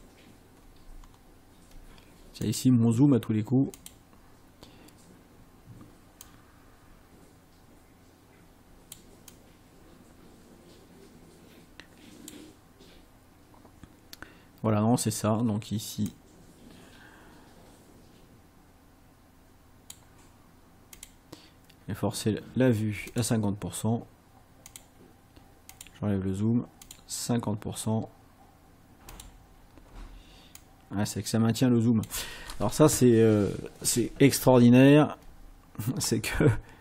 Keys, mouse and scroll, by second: 1.0-1.4 ctrl+scroll down 2, 2.5 click, 3.8 click, 6.2-9.1 drag, 9.3-12.5 drag, 16.1-20.1 drag, 21.0 click, 23.1 click, 24.7 click, 25.7 click, 26.9 click, 29.1 click, 30.6-32.3 drag, 34.7-35.0 ctrl+scroll up 2.